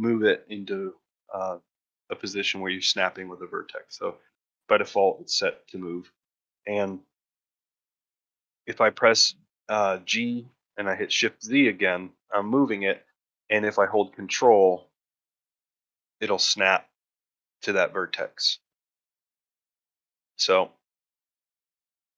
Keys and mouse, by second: 7.4 shift+middle drag.